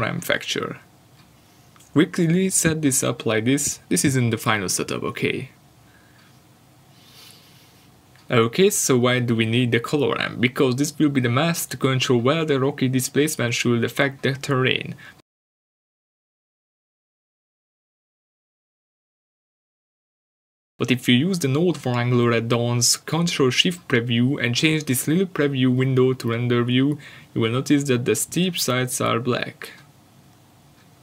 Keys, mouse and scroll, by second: 28.2 click, 29.4-29.9 scroll down 1, 30.3 ctrl+shift+click.